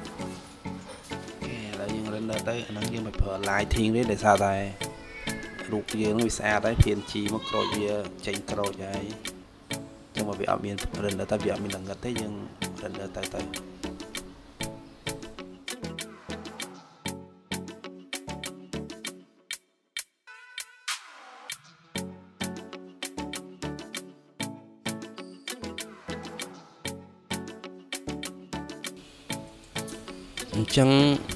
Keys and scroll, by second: 0.1-1.1 typing, 18.5 shift+s.